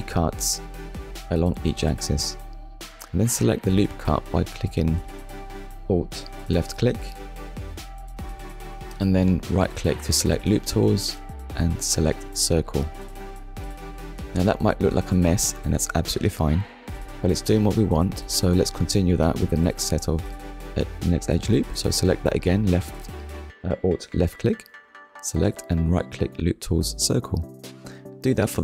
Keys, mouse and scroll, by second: 2.4 alt+click, 3.1 middle click, 6.2 right click, 13.3 click, 14.5 middle click, 18.1 middle click, 18.9 alt+click, 19.9 right click, 21.1 click, 22.1 middle click, 23.4 alt+click, 24.4 middle click, 26.3 right click, 27.5 click, 28.1 middle click.